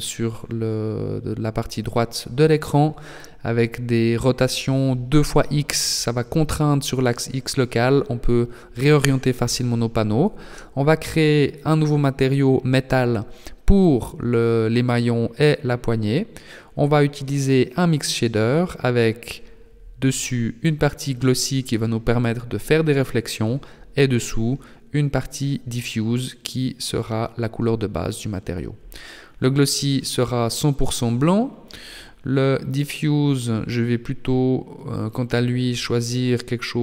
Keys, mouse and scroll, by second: 6.0 right click, 8.7 click, 8.9 click, 9.3 click, 12.0 click, 14.0 click, 18.3 click, 24.6 click, 30.4 click, 36.2 click.